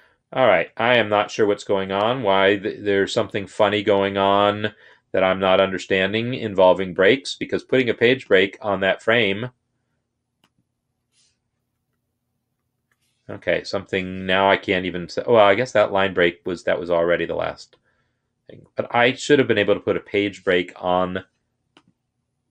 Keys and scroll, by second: 11.7 Return, 17.1 ctrl+z.